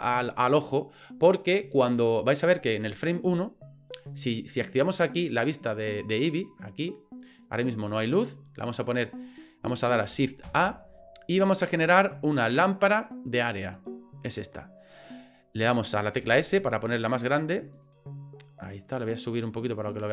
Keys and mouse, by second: 6.6 click, 10.4 shift+a, 16.2 s, 19.3 click.